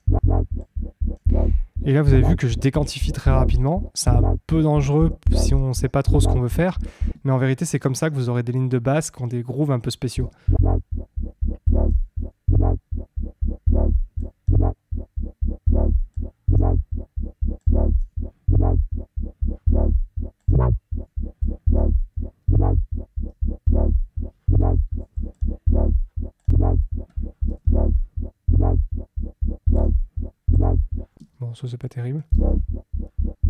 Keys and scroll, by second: 7.1 space, 10.1 space, 23.6 Down, 26.6 Down, 31.1 space.